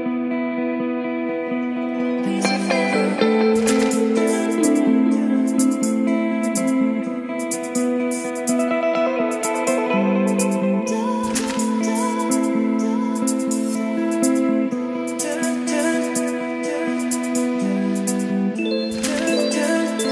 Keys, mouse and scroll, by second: 3.7-11.0 drag, 11.0-12.1 scroll up 2, 12.1-19.2 drag, 19.9-20.1 typing.